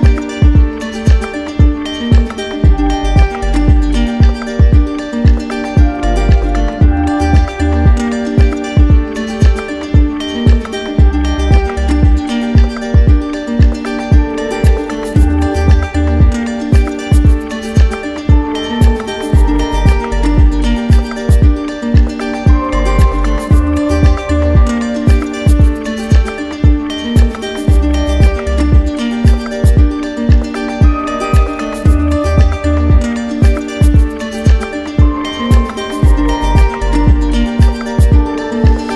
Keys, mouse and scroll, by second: 1.9 click, 3.7 click, 4.9 click, 5.6 alt+click, 8.3 click, 8.9 shift+click, 10.4 shift+click, 10.9 alt+click, 13.1 click, 13.6 shift+click, 15.0 alt+click, 16.3 click, 19.1 click, 19.9 click, 22.0 click, 23.0 click, 23.3-23.8 typing, 24.2 Return, 25.9-27.0 drag, 27.6-28.7 drag, 29.1-30.3 typing, 30.9 Return, 34.7-35.9 alt+drag, 38.5 alt+click.